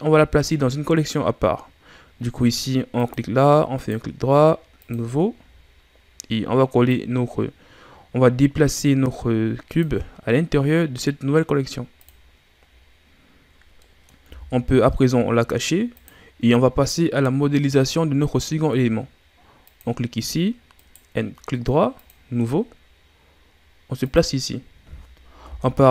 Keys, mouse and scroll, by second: 1.3-2.7 scroll down 1, 2.9 click, 3.7 right click, 5.3-5.6 scroll down 6, 6.9 click, 12.0 click, 12.6-13.8 scroll down 6, 13.8 middle click, 14.2 a, 14.9-15.9 scroll down 5, 15.9 click, 19.6 click, 20.7-22.6 right drag, 22.6 scroll down 4, 24.0 click, 25.4 KP_1.